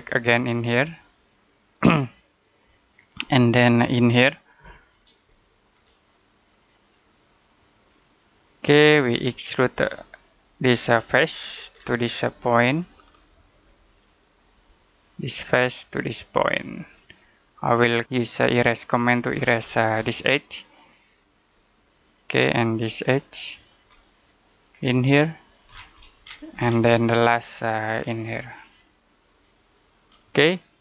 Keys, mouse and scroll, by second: 3.1 middle click, 5.2 middle click, 6.3 click, 11.3-13.8 scroll down 1, 14.3 click, 17.2 middle click, 18.5 click, 19.2 scroll down 1, 19.4-20.1 scroll up 1, 20.4 click, 21.4 middle click, 23.0 click, 23.8 middle click, 24.9 click, 25.5 scroll down 1, 26.1-26.5 scroll down 1, 26.8 middle click, 29.1 click, 30.0 middle click.